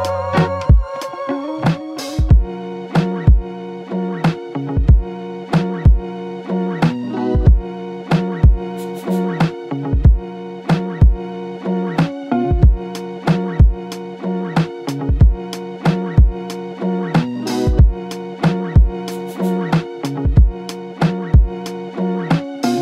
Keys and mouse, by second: 0.1 double click, 0.2 alt+click, 1.7 double click, 2.9 alt+click, 5.2 double click, 5.5 alt+click, 6.7 double click, 8.6 alt+click, 10.4 double click, 10.8 alt+click, 12.8 double click, 13.6 alt+click, 14.9 double click, 15.3 alt+click, 17.1 f, 18.6 double click.